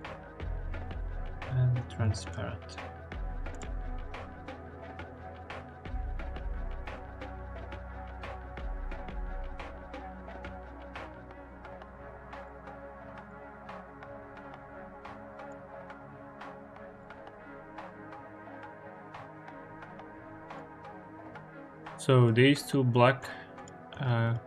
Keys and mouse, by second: 0.2 shift+a, 1.7 BackSpace, 1.9 BackSpace, 4.7 click, 5.7 click, 8.0 click, 8.7 click, 9.0 click, 10.7 click, 11.8 click, 12.9 click, 13.5 click, 14.7-15.3 drag, 15.9-16.8 drag, 17.1 click, 17.8-18.4 drag, 19.0 click, 21.8 click, 23.4 click, 23.7 click, 24.1-24.4 drag.